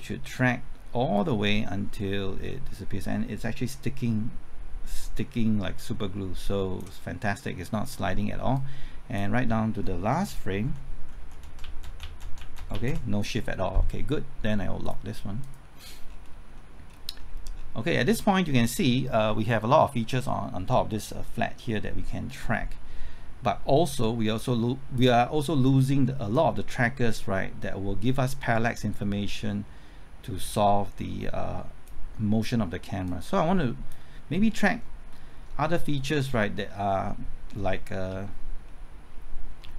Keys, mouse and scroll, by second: 1.1-5.3 drag, 5.4-7.3 drag, 10.1-11.6 typing, 11.8 Right, 12.0 Left, 12.2 Right, 12.3 Left, 12.5 Right, 12.7 Left, 12.8 Right, 14.8 click, 16.0 scroll down 1, 16.5 middle click, 17.1-17.5 scroll up 1, 17.5 scroll down 1, 17.7 middle click, 18.3-18.8 scroll down 1, 18.8 scroll up 1, 24.0-34.3 drag, 35.4-36.6 scroll up 1, 36.6-37.0 scroll down 1, 37.0-37.8 scroll up 1, 37.8 scroll down 1, 38.1 typing, 38.6 shift+middle click, 39.6 scroll up 1.